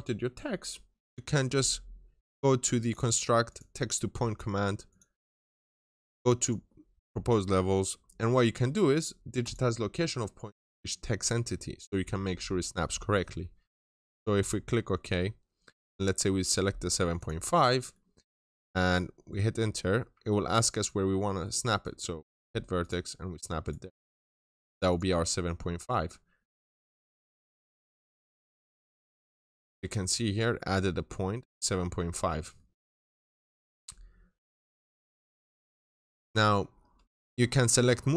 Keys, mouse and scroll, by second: 0.4-0.9 scroll down 1, 0.9 middle click, 2.6 click, 5.2-6.2 scroll up 1, 6.2 click, 15.0-15.5 scroll up 1, 15.5 middle click, 16.0-17.0 scroll up 1, 17.0 click, 17.5-19.1 scroll up 1, 19.1 right click, 22.2 click, 22.6 double click, 23.5 right click, 24.7 click, 25.4 scroll down 1, 25.6 middle click, 27.1 scroll down 1, 28.3 ctrl+shift+click, 29.5 scroll up 1, 31.9-32.4 scroll down 1, 32.4 middle click, 32.7 scroll down 1, 33.1 ctrl+shift+click, 35.7 click, 36.4-36.9 scroll up 1, 36.9 middle click, 37.0 scroll up 1.